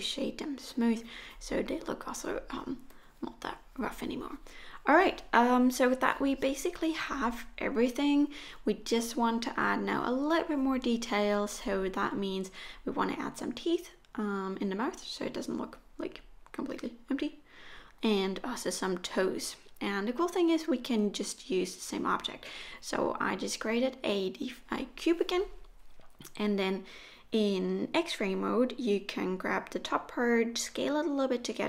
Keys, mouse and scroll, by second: 1.0 click, 1.4 middle click, 2.4 scroll down 5, 2.6 middle click, 3.7-4.4 scroll up 1, 4.4-5.5 scroll up 2, 5.7 middle click, 6.2 scroll up 1, 6.6 shift+middle click, 7.4-8.0 scroll up 1, 8.2 shift+a, 12.2 middle click, 12.6 KP_1, 15.0 Tab, 16.2 s, 18.9 alt+z, 19.4 click, 20.5 s, 24.4 click, 25.4 s, 26.5 click, 27.4 s, 28.9 g, 30.7-31.6 scroll up 2.